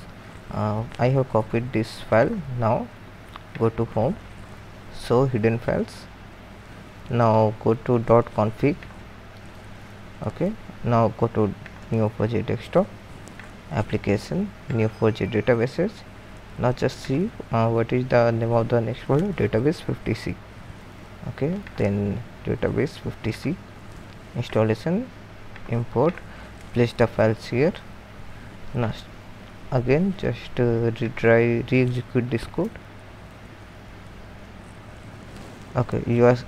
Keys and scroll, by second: 26.6 ctrl+v, 34.4 ctrl+Return.